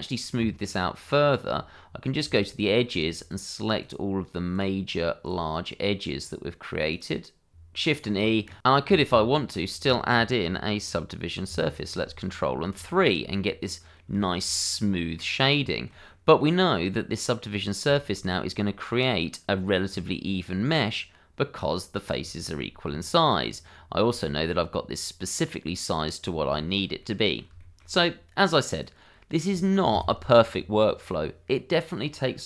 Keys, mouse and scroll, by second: 0.3 Tab, 2.0 alt+click, 2.1 alt+shift+click, 2.8 alt+shift+click, 3.3 shift+click, 4.1 alt+shift+click, 4.3 middle click, 4.5 scroll up 1, 4.7 shift+click, 5.1 alt+shift+click, 5.3 middle click, 5.5 alt+shift+click, 6.0 ctrl+click, 6.2 shift+click, 6.6 c, 6.7 middle click, 7.0 Escape, 7.3 shift+e, 7.8 click, 8.6 Escape, 9.3 Tab, 9.8 middle click, 11.4 ctrl+3, 11.9-12.2 scroll down 1, 12.2 middle click, 12.9 shift+middle click, 13.3 middle click, 14.3 shift+middle click, 14.5 middle click, 15.3 scroll up 1, 15.6 shift+middle click, 16.0 middle click, 17.9 shift+middle click, 18.2-19.9 scroll up 1, 19.9 Tab, 21.9 click, 22.3 shift+click, 22.9 Tab, 23.4 scroll down 1, 23.7 middle click, 24.2 shift+middle click, 24.5-25.3 shift+scroll up 1, 25.3 middle click, 26.2 scroll down 1, 26.5 shift+middle click, 27.0 middle click, 28.7 click, 29.1 middle click, 30.3 shift+middle click, 32.3 shift+middle click.